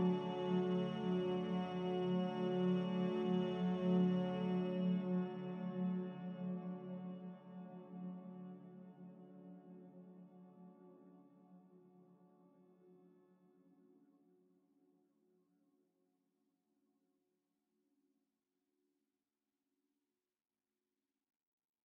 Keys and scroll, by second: 5.4 z, 8.5 a, 12.7 z, 15.7-16.4 typing.